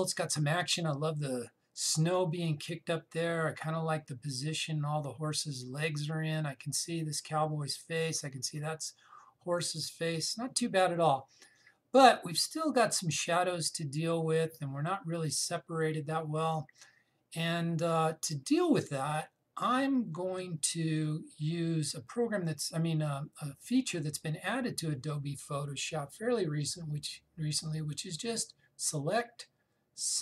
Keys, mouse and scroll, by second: 27.3 click.